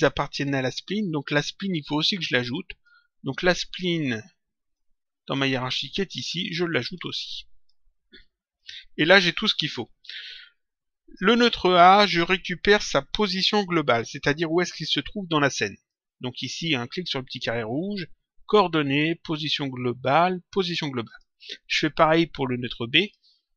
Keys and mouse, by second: 1.9 click, 4.6 click, 6.5 click, 8.9 click, 15.7 click, 21.0 click, 22.9 click.